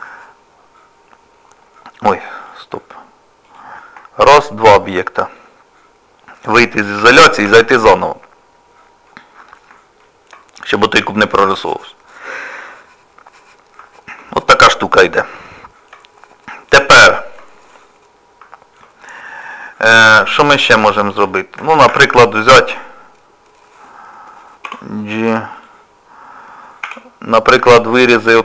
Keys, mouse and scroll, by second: 2.4 click, 3.5 click, 4.3 shift+click, 4.4 shift+click, 7.0 KP_Divide, 7.5 KP_Divide, 9.1 middle click, 10.0 shift+middle click, 10.3 KP_Divide, 10.6 scroll up 1, 10.8 scroll down 1, 10.9 scroll up 1, 11.6 scroll down 2, 12.6 middle click, 14.4-15.2 scroll down 3, 15.3 shift+middle click, 17.7 middle click, 19.5 click, 20.1 middle click, 21.3 shift+middle click, 21.6 click, 21.9 Tab, 24.7 g, 26.9 s.